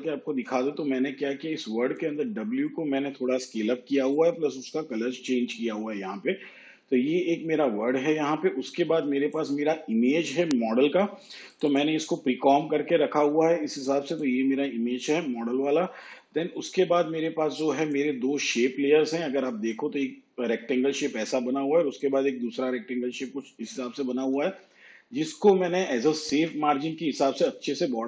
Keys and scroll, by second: 6.8 ctrl+z.